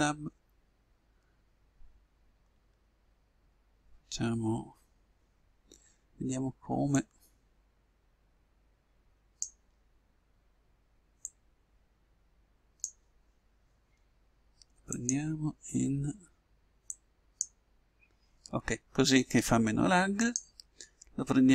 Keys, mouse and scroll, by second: 0.0 Tab, 8.0-9.2 drag, 11.4-13.4 drag, 15.6-17.2 drag, 20.2-21.5 drag.